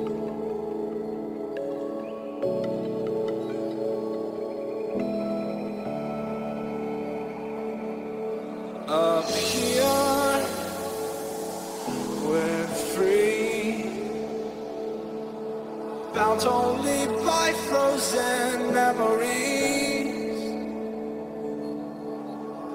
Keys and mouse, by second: 2.0 Tab, 8.5-12.8 middle drag, 13.9-15.3 middle drag, 17.3-22.6 drag.